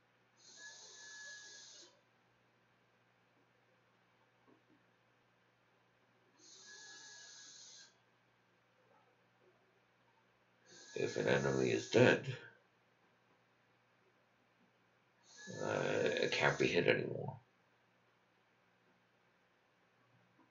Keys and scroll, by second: 0.0-1.8 typing, 2.3 Tab, 2.9-4.3 typing, 4.8 Return, 5.5 shift+Return, 5.7-8.1 typing, 6.8 Return.